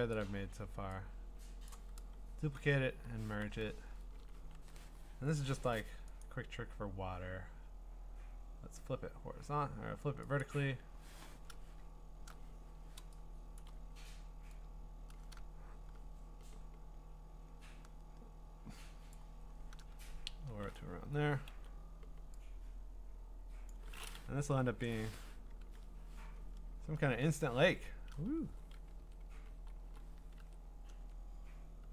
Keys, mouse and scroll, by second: 0.1 shift+click, 1.7 click, 2.6 ctrl+e, 3.7-4.3 scroll, 4.5 ctrl+t, 6.2 right click, 8.3 right click, 10.4 click, 11.9 middle click, 12.0 middle click, 13.6 click, 13.7 click, 19.1 shift+click, 20.2 Return, 21.5 m, 23.7 click, 24.6 BackSpace, 25.6 ctrl+d, 26.4 scroll, 28.5 v, 29.9 middle click, 30.2 Down, 30.4 ctrl+z, 30.9 ctrl+z, 31.8 ctrl+z.